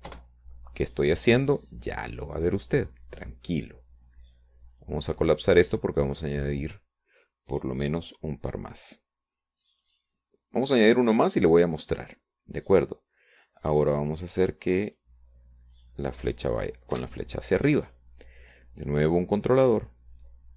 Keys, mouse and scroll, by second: 1.2 KP_Subtract, 2.1 KP_1, 2.9 KP_Enter, 5.8 middle click, 7.6 click, 9.1 click, 12.6 click, 13.9 click, 16.2 click, 17.7 click, 19.8 Up.